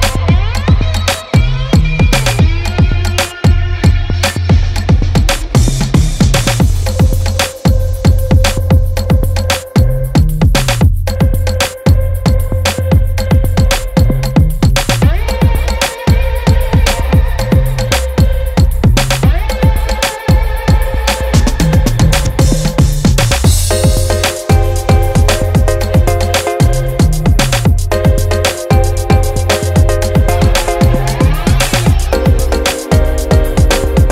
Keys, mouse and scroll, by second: 0.2 Tab, 0.8 ctrl+r, 1.8 ctrl+b, 3.8 ctrl+r, 4.7 ctrl+b, 6.9-8.4 middle drag, 10.5 click, 11.3 Tab, 12.6 middle click, 13.3 middle click, 14.0 middle click, 16.7 Tab, 17.6 ctrl+r, 19.9 ctrl+z, 20.7 ctrl+r, 21.6 ctrl+b, 23.3 middle click, 23.6 middle click, 24.9 middle click, 26.2 Tab, 27.1 Tab, 28.9 ctrl+r, 30.1 ctrl+b, 31.7 Tab, 33.7 Tab.